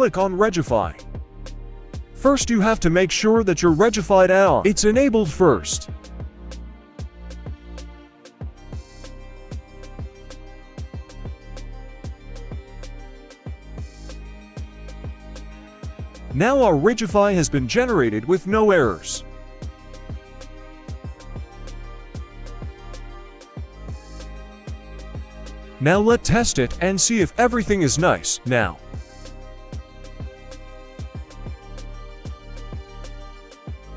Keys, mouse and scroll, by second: 0.5-15.1 drag, 21.1 click, 22.1-24.1 scroll down 2, 24.1-25.2 scroll down 1, 25.2-25.5 scroll up 3, 25.5-25.9 middle drag, 26.7-27.5 drag, 28.2 right click, 29.1-29.4 shift+middle drag, 29.6 scroll down 1, 30.4 g, 32.2 right click, 32.4 g, 33.7 right click.